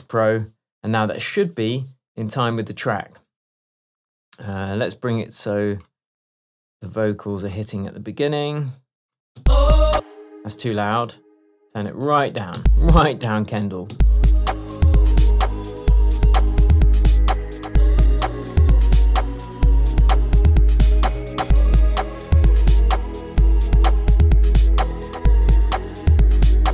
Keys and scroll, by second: 1.3 shift+Tab, 7.7 BackSpace, 9.5 space, 12.6 space.